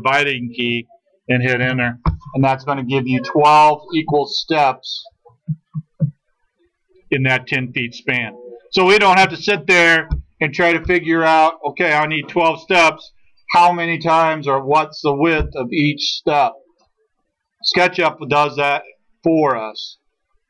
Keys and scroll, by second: 1.7 Return.